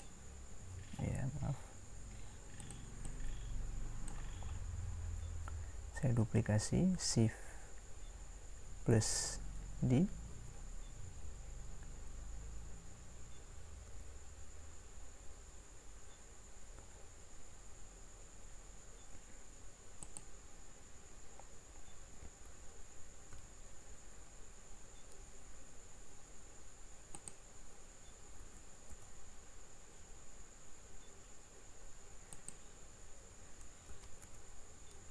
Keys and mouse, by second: 10.3 shift+d, 22.4 shift+d, 28.4 shift+d, 33.9 shift+d.